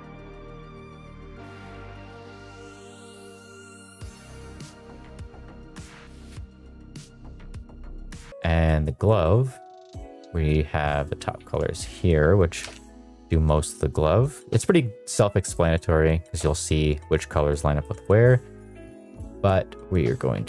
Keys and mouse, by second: 0.2 middle click, 0.2 middle click, 0.3 ctrl+c, 0.5 middle click, 0.7 ctrl+v, 0.8 ctrl+v, 0.8 ctrl+v, 0.9 middle click, 1.5 middle click, 1.7 middle click, 1.8 middle click, 2.1 ctrl+v, 2.2 ctrl+v, 2.3 ctrl+v, 2.3 click, 2.6 middle click, 2.8 click, 2.9 click, 3.2 middle click, 3.4 shift+middle click, 3.9 middle click, 4.1 ctrl+v, 4.3 ctrl+v, 4.4 click, 4.7 click, 4.9 click, 6.1 middle click, 6.3 shift+middle click, 6.8 middle click, 6.9 middle click, 7.1 ctrl+c, 7.2 middle click, 7.3 middle click, 7.4 middle click, 7.5 ctrl+v, 7.6 ctrl+v, 7.7 click, 7.7 click, 7.9 shift+middle click, 8.0 shift+middle click, 8.0 click, 8.2 middle click, 8.2 middle click, 8.3 middle click, 8.6 middle click, 9.1 middle click, 10.2 middle click, 11.0 middle click, 11.8-12.9 drag, 14.5 middle click, 15.5 middle drag, 17.7 middle click, 18.9 drag, 19.8 ctrl+v, 20.3 ctrl+v.